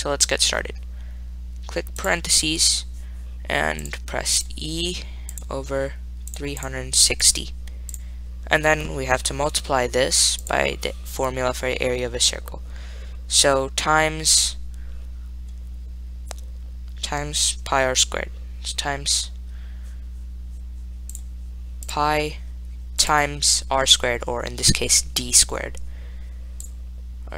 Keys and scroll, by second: 2.2 (, 5.6 /, 6.6-11.0 typing, 22.1 ^, 23.4 *.